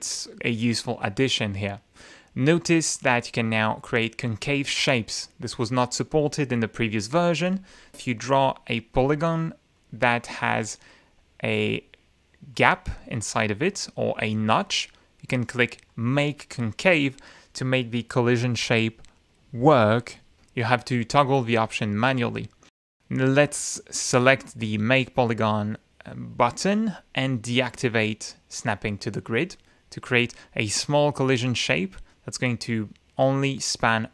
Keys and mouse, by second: 7.0 click, 7.9 click, 8.9 click, 9.7 click, 10.4 click, 11.0 click, 11.5 click, 12.5 click, 15.8 click, 24.2 click, 27.6 click, 30.9 click, 32.5 click, 33.7 click.